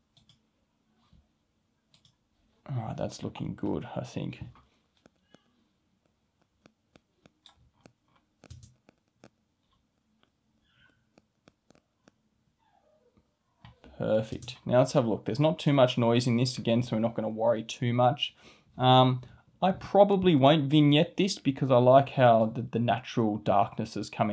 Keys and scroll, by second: 8.5 space, 14.3 space.